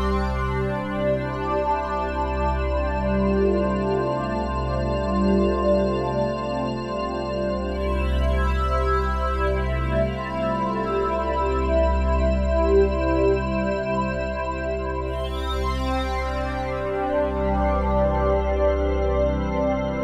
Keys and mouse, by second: 1.5 click, 2.8 space, 4.2 space, 4.5 click, 5.5 Delete, 7.8-9.0 drag, 11.5 click, 13.3-14.9 drag, 15.5-17.7 drag.